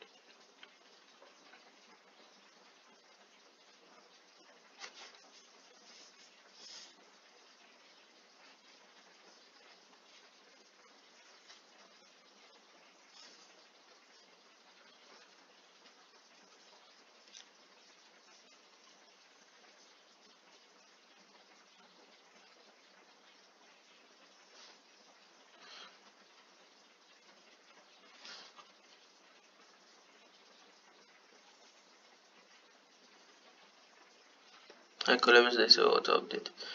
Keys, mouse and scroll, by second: 33.2 click.